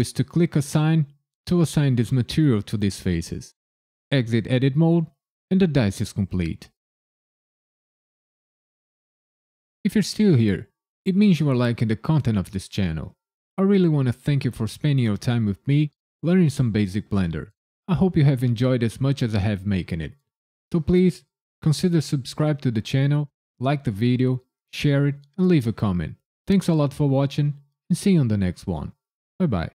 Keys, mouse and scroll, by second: 0.7 click, 4.1 Tab, 4.7 KP_Decimal, 5.1-5.4 scroll down 1, 5.4 middle click.